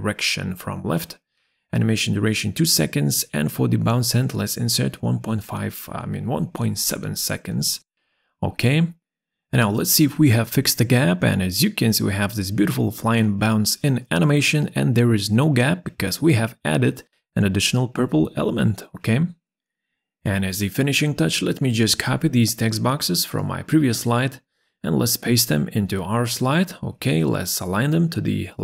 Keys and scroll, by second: 1.4 2, 1.4 Return, 5.9 1, 5.9 ,, 6.5 7, 6.6 Return, 23.6 ctrl+c.